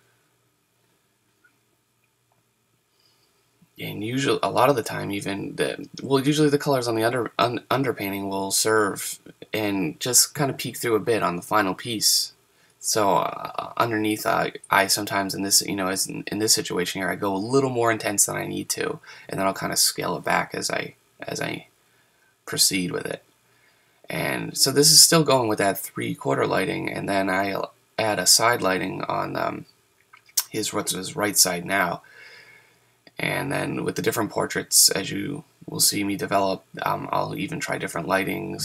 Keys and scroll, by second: 5.6 super+z, 10.1 super+z, 10.8 super+z, 36.9 super+z.